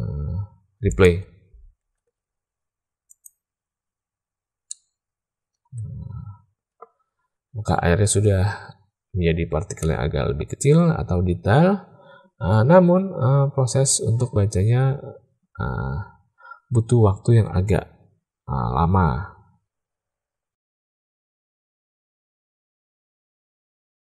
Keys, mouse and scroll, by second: 3.1 click, 5.5-6.8 middle drag, 21.5 click, 21.7 middle click, 22.4 click.